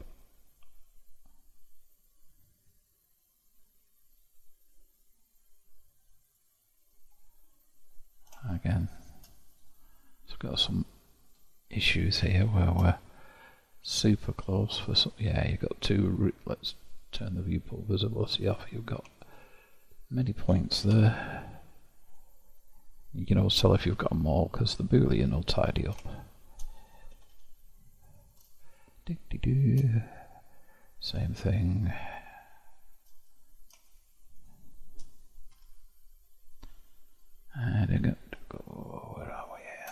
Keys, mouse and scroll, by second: 7.8-8.5 scroll up 1, 8.5-9.5 shift+middle drag, 9.5-10.6 drag, 10.6-11.7 middle drag, 11.7-12.3 scroll up 1, 12.3 shift+middle click, 13.0-13.8 scroll up 1, 13.8-15.4 drag, 16.9 click, 17.6-18.4 scroll up 1, 18.4-19.2 scroll up 1, 19.2-20.9 shift+drag, 20.9 0, 22.1 click, 23.1-24.6 scroll down 1, 24.6 click, 25.1-27.2 middle drag, 27.2 g, 28.7-30.9 shift+middle drag, 30.9 click, 32.3 shift+click, 33.2 click, 33.9 shift+click, 34.4 shift+click, 35.6 0, 36.5-39.9 middle drag.